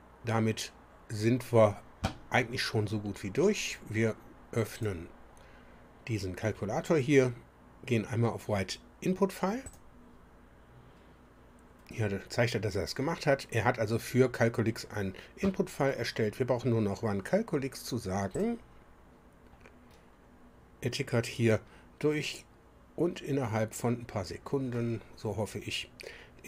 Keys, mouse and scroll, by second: 4.6 click, 9.6 click, 11.2-11.6 scroll down 1, 18.3 click.